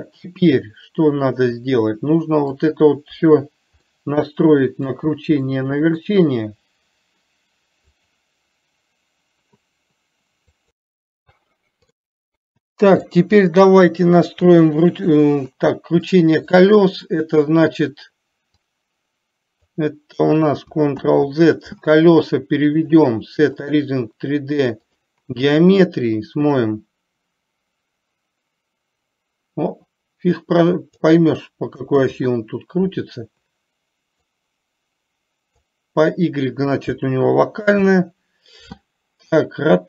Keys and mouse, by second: 3.4 KP_1, 4.1-5.1 middle drag, 5.6 middle click, 12.2 click, 13.4 click, 14.7 KP_3, 16.5-16.9 shift+middle drag, 19.2 click, 21.4 ctrl+z, 23.2-25.5 drag, 26.6-31.5 drag, 32.5 ctrl+z, 34.7-36.1 drag, 38.1 ctrl+z.